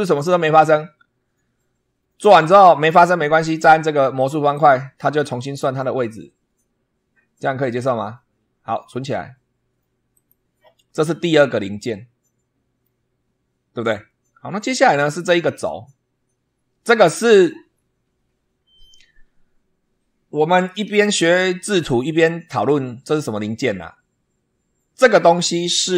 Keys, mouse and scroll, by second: 2.4 click, 4.4 click, 10.0 click, 10.8 scroll down 1, 11.2-12.9 middle drag, 14.1 scroll up 2, 21.1-21.7 shift+middle drag.